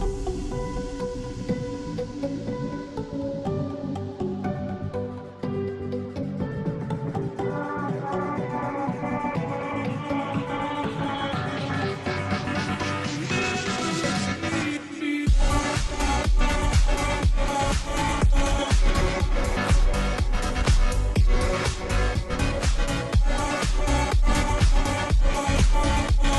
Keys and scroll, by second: 3.3 Return, 4.2 Delete, 5.3 ctrl+t, 13.3 space, 15.7 Return, 15.7 space.